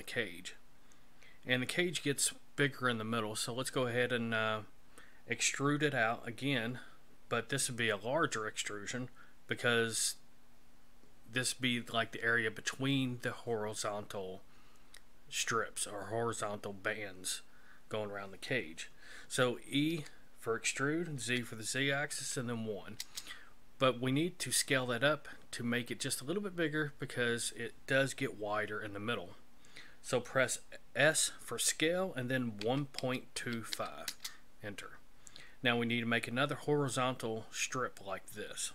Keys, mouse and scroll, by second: 19.9 e, 31.1 s.